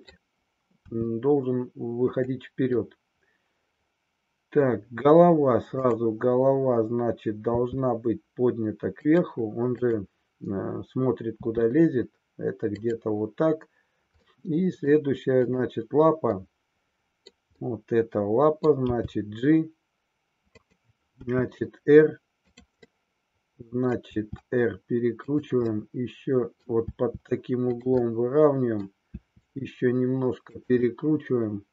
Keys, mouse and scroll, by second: 0.8 r, 2.8-4.7 middle drag, 5.8-6.9 drag, 7.7 r, 9.1 click, 9.8-10.9 drag, 11.3 r, 14.2 middle click, 15.6-16.8 drag, 16.8 middle click, 17.6-18.7 middle drag, 18.8 g, 20.7 click, 21.2 r, 22.9-24.1 middle drag, 24.2 r, 25.8-26.7 middle drag, 27.9-29.0 middle drag, 30.8-31.7 middle drag.